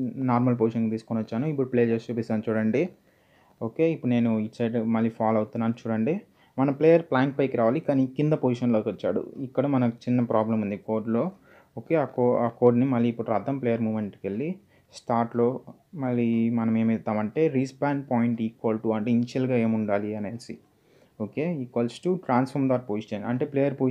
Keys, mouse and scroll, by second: 0.9 click, 4.2-5.0 typing, 11.4 click, 13.0 click, 14.1-14.8 scroll down 1, 14.8 click, 15.9 Return, 18.7-20.0 typing, 20.3 Return, 21.2 =, 23.4-23.9 typing.